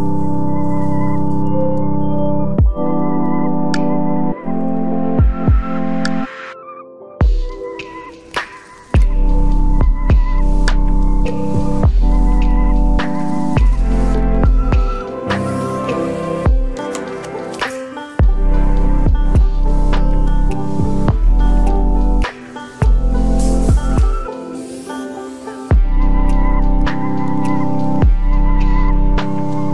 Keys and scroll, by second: 17.9 ctrl+t.